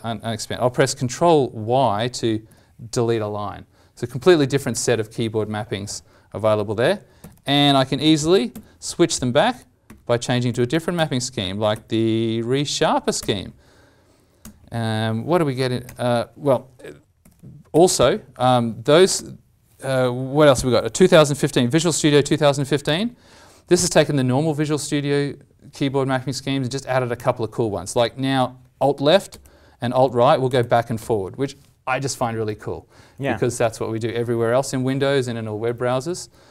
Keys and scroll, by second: 2.4 ctrl+y, 4.2 ctrl+z, 7.2 alt+t, 17.1 alt+t, 29.3 alt+Left, 29.9 alt+Right, 30.5 alt+Left, 31.0 alt+Left, 32.2 alt+Right, 32.5 alt+Right, 35.6 alt+Left, 35.9 alt+Left.